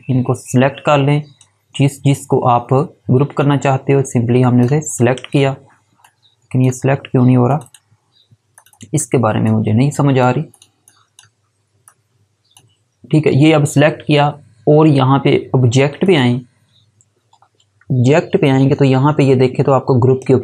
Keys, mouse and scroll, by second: 15.9 click, 18.2 ctrl+4.